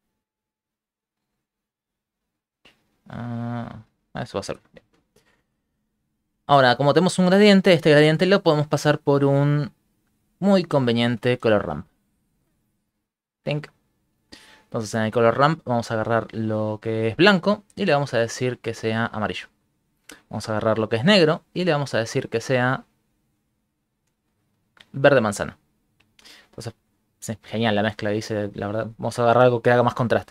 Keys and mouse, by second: 4.8 shift+middle click, 5.0 alt+shift+z, 5.3 shift+middle click, 5.7 ctrl+middle click, 6.6 ctrl+middle click, 6.7 shift+middle click, 6.9 shift+middle click, 7.3 ctrl+middle click, 9.8 middle click, 10.3 click, 11.1 shift+a, 13.9 shift+middle click, 15.9 click, 16.5 click, 17.7 click, 20.3 click, 20.8 click, 21.7 click, 22.3 click, 23.3 click, 27.1 click, 27.6 click, 28.7 click, 29.4 click.